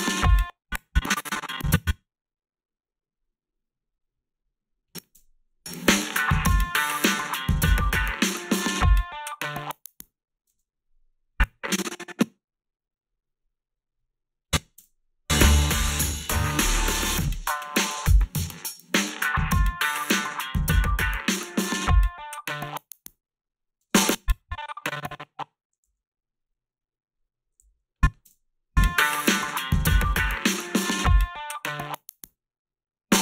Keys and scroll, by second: 0.2 space, 5.2 space, 10.5 space, 14.8 space, 23.8 space, 25.8 s, 27.6 a, 28.2 space.